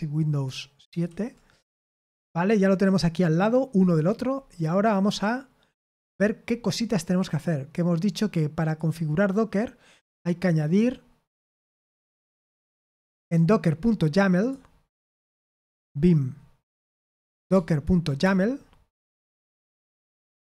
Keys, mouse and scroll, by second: 0.9 super+/, 1.7 super+7, 4.3-5.9 scroll up 1, 5.9-8.6 scroll down 1, 8.6 click, 9.0 click, 10.1-14.4 scroll down 1, 14.4 click, 16.4-17.8 typing, 18.2 Return, 19.4 Return, 20.1-20.5 typing.